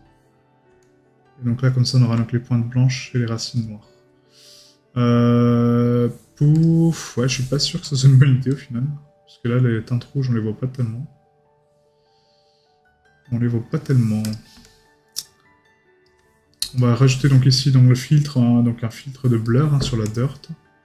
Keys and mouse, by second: 7.0 right click, 16.8 right click, 19.4 right click.